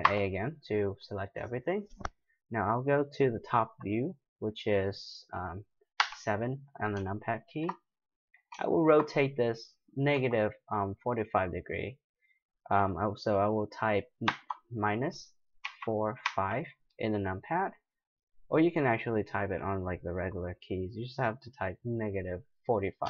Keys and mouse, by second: 0.0 a, 6.0 KP_7, 7.3-13.4 middle drag, 10.1 r.